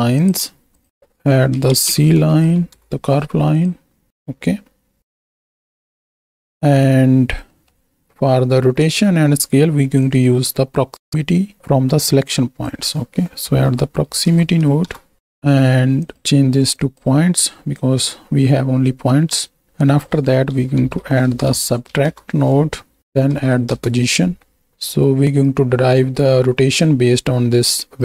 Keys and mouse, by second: 0.7-2.8 alt+shift+drag, 4.2 click, 5.2-6.2 right drag, 7.4 middle click, 10.2-14.9 drag, 15.2 click, 15.9-16.9 drag, 17.4 click, 19.7-22.2 drag, 23.0 click, 24.8 middle drag, 25.6-26.0 right drag, 26.5 right click, 27.7 right click.